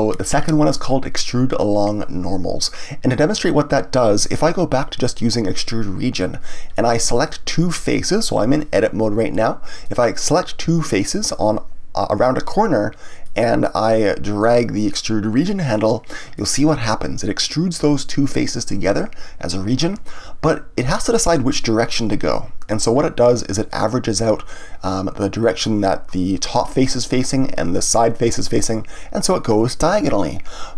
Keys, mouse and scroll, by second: 6.7-9.7 middle drag, 9.8 click, 10.9 shift+click, 13.2-14.7 middle drag, 14.7-16.3 drag, 16.3-19.3 middle drag.